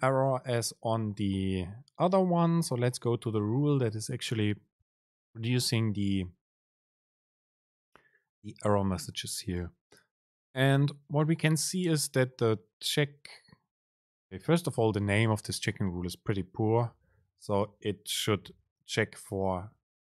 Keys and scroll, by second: 16.7 BackSpace.